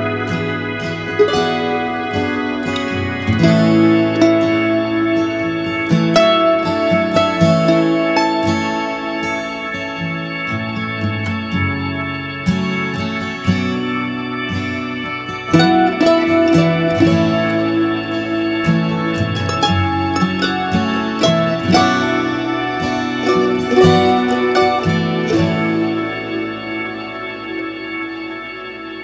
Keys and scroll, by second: 28.3 alt+space.